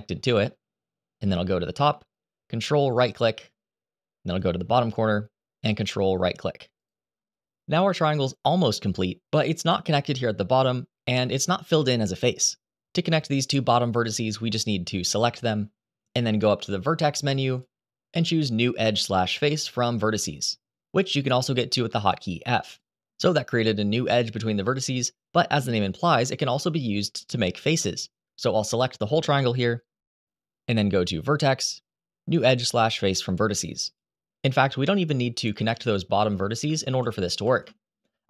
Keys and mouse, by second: 2.7 ctrl+right click, 6.5 ctrl+right click, 14.7 click, 17.3-22.5 drag, 28.6-29.7 drag, 31.1-33.7 drag, 35.2 ctrl+z, 35.8 ctrl+z, 36.5 ctrl+z, 37.2 ctrl+z.